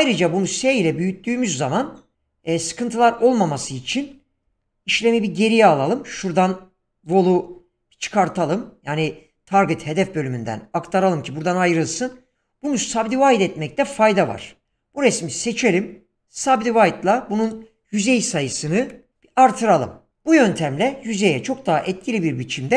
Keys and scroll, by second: 0.0 s, 14.6 Tab, 18.3 typing, 19.1 Return.